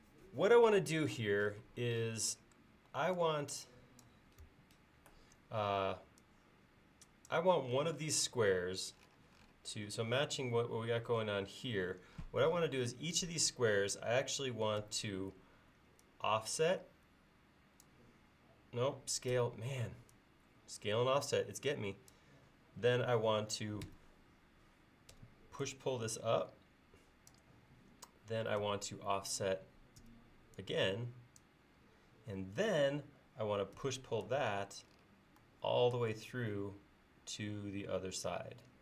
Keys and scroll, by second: 4.5 Escape, 5.7 e, 14.9 s, 19.4 f, 23.9 p, 25.2 Escape, 28.7 p, 30.1 f, 33.9 p.